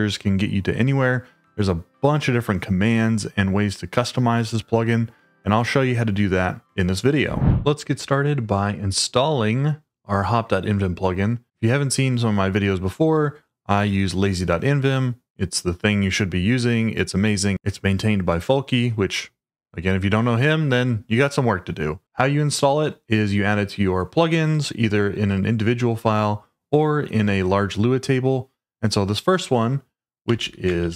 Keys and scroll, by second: 0.7-3.1 typing, 3.3 Tab, 3.8 Return, 5.6 h, 7.3 shift+;, 30.0-30.9 typing.